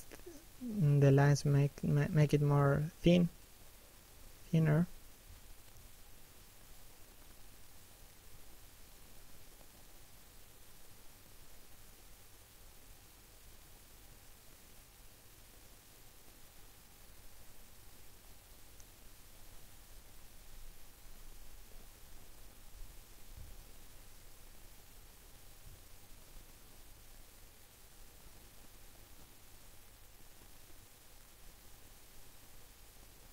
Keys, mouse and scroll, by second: 2.5 middle click, 3.3 shift+middle click, 3.7 middle click, 4.2 f, 4.5 click, 6.5 click, 11.0-11.5 scroll down 1, 11.5 middle click, 13.4 scroll up 1, 13.7 click, 15.5 shift+middle click, 16.0 click, 17.1 click, 18.2 click, 18.4 scroll down 1, 18.8 shift+middle click, 20.0 middle click, 20.6 shift+middle click, 20.9 scroll up 1, 21.3 click, 23.5 scroll down 1, 24.3 middle click, 25.0 shift+middle click, 25.5-26.0 scroll down 1, 26.0 middle click, 27.7 middle click, 28.1 shift+middle click, 28.4 scroll up 1, 29.4 middle click.